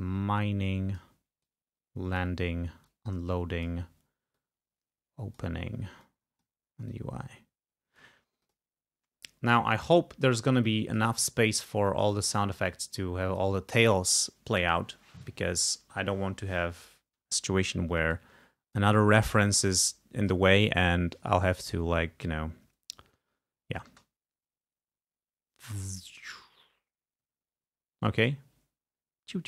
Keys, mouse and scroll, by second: 0.0-1.3 drag, 1.6 click, 3.0-4.0 drag, 4.5-5.7 drag, 6.1 click, 7.0-8.3 drag, 8.6 click, 9.7 click, 10.8 click, 11.6 click, 12.8 click, 18.2-21.3 drag, 24.1 space.